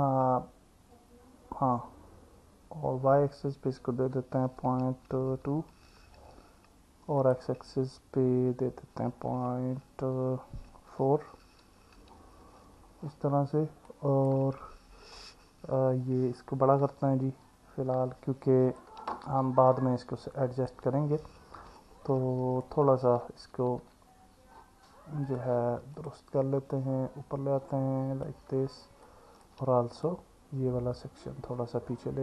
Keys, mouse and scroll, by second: 7.2-11.8 drag, 13.9 click, 16.8 s, 20.4 click, 21.8-22.6 alt+middle drag, 23.8 Tab, 25.3 click, 26.0 click, 29.1 alt+middle click, 30.0 click, 31.2 click.